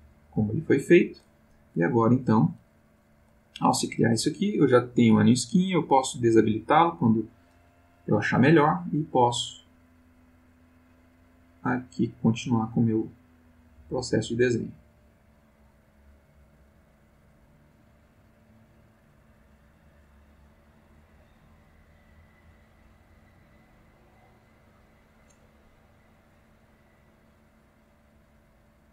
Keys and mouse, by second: 6.5 click, 9.6-12.5 drag, 12.8-23.5 drag, 24.0-25.4 drag, 27.2-28.9 drag.